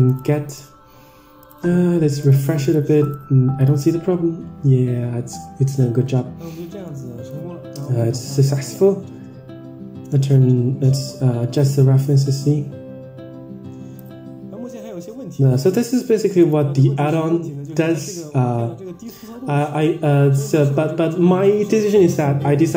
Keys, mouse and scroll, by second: 0.2 click, 0.6 click, 1.5 click, 2.3 click, 2.8 click, 3.1 click, 3.8 click, 4.4-5.0 scroll down 5, 4.8-5.3 scroll up 5, 6.4-6.8 middle drag, 7.2 Tab, 8.2-14.1 drag, 14.3-14.8 scroll down 5, 14.8-15.2 scroll down 1, 15.2 scroll down 2, 16.0 click, 16.5 click.